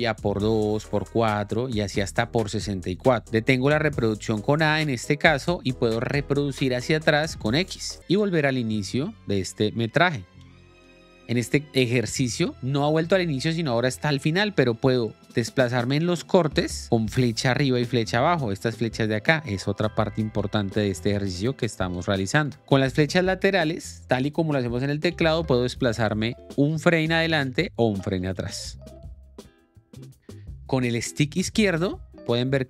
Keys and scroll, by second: 0.3 l, 3.2 k, 7.9 j, 10.4 j, 10.9 k, 16.2 Down, 19.8 Up, 20.3 Down, 20.8 Up, 21.1 Down, 22.2 Up, 25.4 Right, 26.5 Left, 27.5 Right, 28.9 Left, 29.3 Right, 29.8 Up, 30.6 alt+Tab.